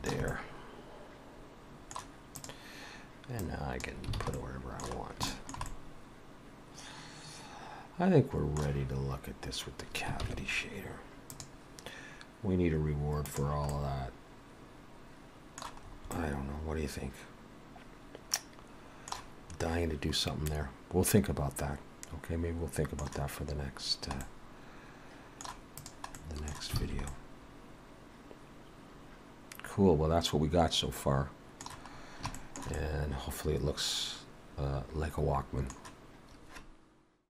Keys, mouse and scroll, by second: 0.3 middle click, 2.4 click, 3.4 click, 4.2 alt+a, 4.4 middle click, 5.0 scroll down 2, 5.3 shift+middle click, 5.7 middle click, 10.3 ctrl+s, 11.4 click, 13.7 middle click, 15.9 scroll up 2, 16.2 middle click, 20.5 middle click, 24.2 middle click, 25.8 click, 26.2 middle click, 26.9 alt+a, 27.1 middle click, 32.1 scroll down 1, 32.4 shift+middle click, 32.8 middle click.